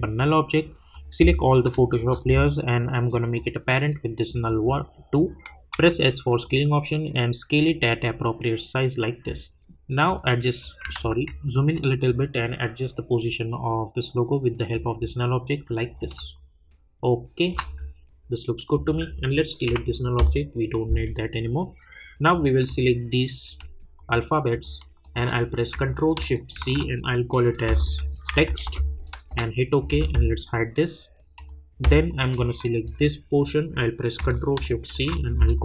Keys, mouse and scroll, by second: 0.1 click, 1.2 scroll down 1, 1.9 shift+click, 2.2 scroll up 1, 3.3 click, 5.7 s, 6.4 click, 11.4-11.7 alt+scroll up 1, 12.1 click, 15.0-16.0 scroll down 1, 16.0-18.7 drag, 22.3 click, 23.4 shift+click, 31.3 click, 32.8 shift+click.